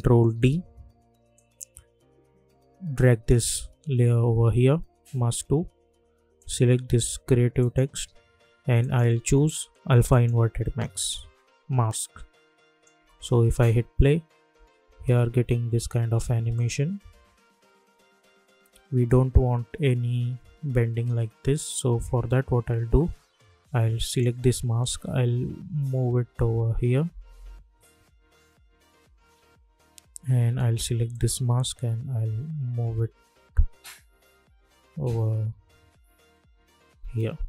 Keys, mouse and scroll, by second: 0.3 ctrl+d, 1.3-5.7 drag, 6.3 click, 12.9 space, 16.5 click, 18.1-18.4 alt+scroll up 1, 19.6-20.1 alt+scroll up 1, 21.9 j, 24.1 click, 25.2 Left, 27.7 Right, 29.3 Left, 31.1 click, 31.8 Right, 33.5 Left, 35.6 Right.